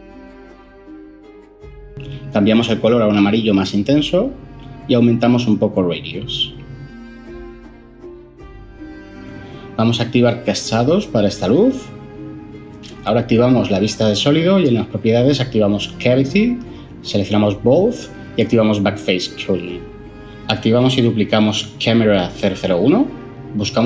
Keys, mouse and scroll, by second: 22.2 shift+d, 22.6 ↻.